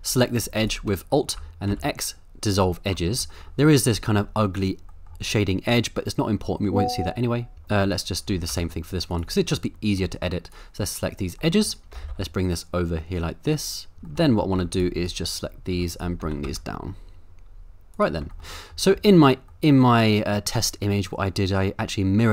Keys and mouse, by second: 1.7 x, 3.0 middle click, 3.3 middle click, 4.0 middle click, 4.9 middle click, 7.9 alt+click, 8.5 x, 9.6 middle click, 10.7 click, 11.5 middle click, 11.9 g, 12.1 y, 14.1 middle click, 14.6 z, 15.2 click, 15.7 z, 16.2 g, 16.4 z, 17.9 click, 18.4 middle click, 18.6 middle click, 18.9 Tab, 19.6-20.3 middle drag.